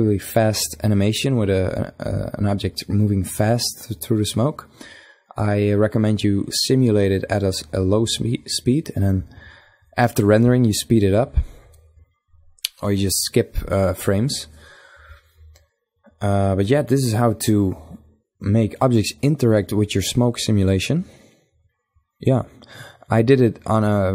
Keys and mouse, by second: 21.8-24.1 middle drag.